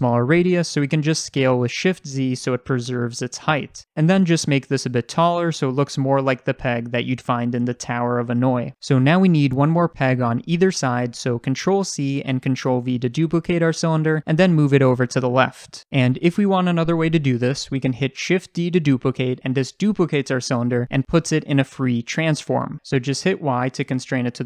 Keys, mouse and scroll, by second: 0.3 click, 1.2 s, 3.6 click, 4.4 s, 5.4 click, 5.7 g, 8.3 click, 9.2-15.5 shift+middle drag, 11.6 ctrl+c, 12.1 ctrl+v, 13.1 g, 15.5 click, 17.2 click, 18.5 shift+d, 24.3-24.4 drag, 24.3-24.4 middle drag, 24.3-24.4 right drag.